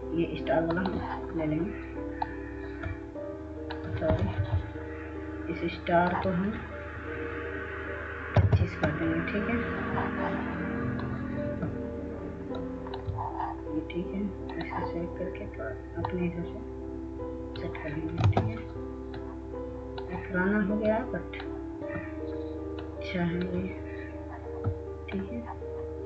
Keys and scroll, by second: 5.4 ctrl+z, 9.2-10.1 typing, 19.3 ctrl+space.